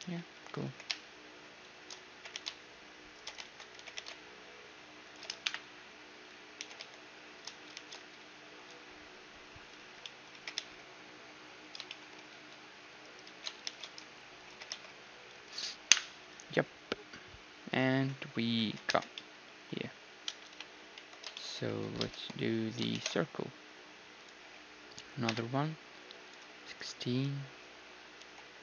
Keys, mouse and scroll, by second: 0.0 z, 0.6 y, 2.1 g, 3.4 ctrl+z, 3.8 g, 5.5 KP_1, 5.7 z, 6.1-7.9 middle drag, 6.6 e, 8.8 z, 9.8 z, 10.0-11.8 middle drag, 10.3 g, 12.3-13.9 middle drag, 12.3 s, 13.3 s, 14.5 g, 15.9 KP_1, 16.3 z, 18.6 z, 18.9 Tab, 19.2-21.0 middle drag, 20.5 KP_1, 21.0 Tab, 21.3 middle click, 21.5 middle click, 21.8 Tab, 22.1 shift+space, 23.0 shift+a, 26.2 F6, 28.2 r.